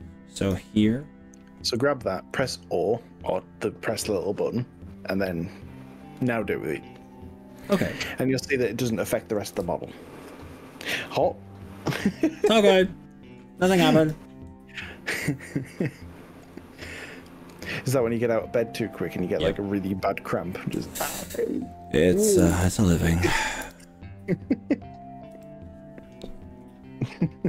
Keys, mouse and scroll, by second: 0.1-0.7 drag, 2.3 click, 3.3 s, 11.9 click, 14.0 click, 15.7 g, 16.5 click, 17.6 g, 20.6 0, 21.7 click, 22.5 ctrl+z, 23.4 o, 25.3 g.